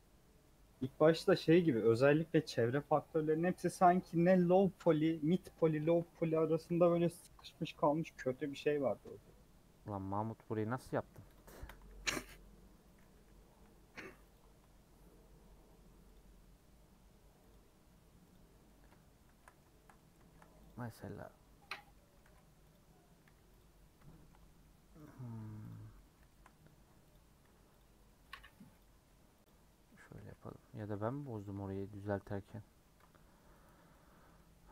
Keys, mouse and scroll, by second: 0.8-1.2 scroll up 4, 1.2 scroll down 4, 1.4 middle click, 1.8-2.8 scroll up 4, 2.8 click, 3.1 middle click, 3.6 click, 4.3 KP_Add, 5.7 shift+middle click, 6.1-6.5 scroll up 6, 6.5 2, 6.7 click, 7.2 g, 8.7-10.6 middle drag, 10.6 click, 10.9 scroll down 2, 11.1 3, 11.3 click, 11.5 shift+middle click, 11.9 s, 13.1 2, 13.5 1, 13.6 middle click, 14.3 click, 14.6-15.3 scroll up 1, 15.6-18.6 scroll up 1, 18.6 middle click, 19.2 shift+Tab, 19.4-20.7 shift+middle drag, 20.7 click, 20.7 g, 21.9 middle click, 22.2 alt+z, 22.7 click, 23.2 g, 24.1 shift+middle click, 25.0 click, 25.4 g, 25.8 scroll down 2, 25.9 middle click, 26.4 scroll up 4, 27.1 click, 27.4 g, 28.0 middle click, 28.8 click, 29.1 g, 29.8 middle click, 30.1 alt+z, 30.8 a, 31.4 m, 31.6 scroll down 3, 32.0 3, 32.2 Left, 32.8 KP_Add, 33.7 scroll down 6, 33.9 middle click.